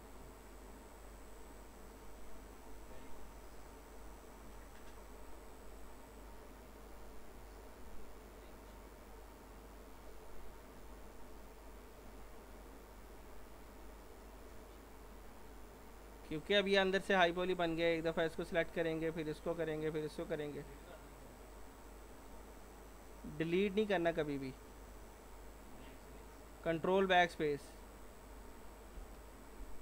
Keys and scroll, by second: 29.0 ctrl+BackSpace.